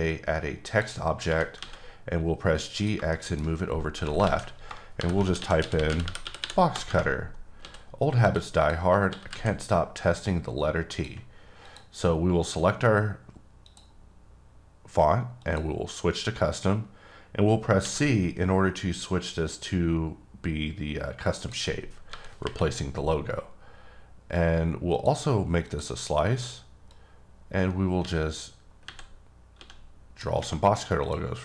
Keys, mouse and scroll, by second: 0.0 click, 1.3 g, 1.6 x, 2.7 click, 3.1 shift+middle click, 3.5-3.9 scroll up 2, 4.2 ctrl+a, 4.9-6.2 typing, 7.6 s, 8.2 click, 8.6 click, 9.1 s, 9.3 z, 10.9 click, 11.6 click, 17.8 c, 21.4 click, 22.1 KP_7, 22.4 KP_Decimal, 25.6 click, 28.0-29.5 typing, 31.0 click.